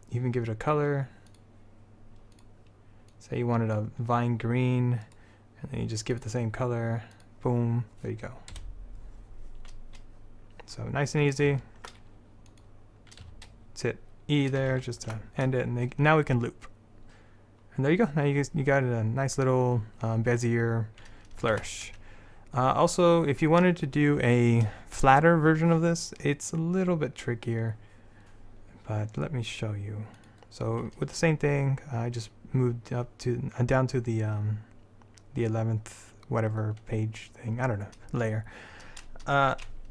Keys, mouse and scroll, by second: 5.2-6.3 right drag, 8.7 KP_7, 11.5 click, 13.4 e, 14.8 alt+space, 15.0 alt+a, 21.7 alt+a, 30.3-32.6 drag.